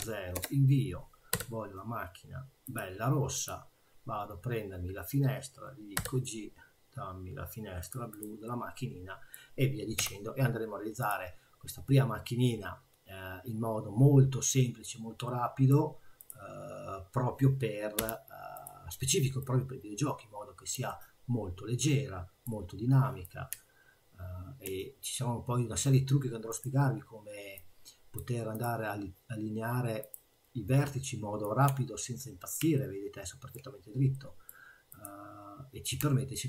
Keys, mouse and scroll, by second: 1.3 g, 3.4 click, 6.0 g, 8.1 click, 8.5 middle click, 10.0 i, 15.3 middle click, 16.2 click, 18.0 2, 18.5 click, 19.5 click, 20.9 middle click, 23.2 click, 26.5 click, 28.5 click, 31.4 click, 32.8 middle click, 34.1 middle click, 34.9 click, 35.8 click.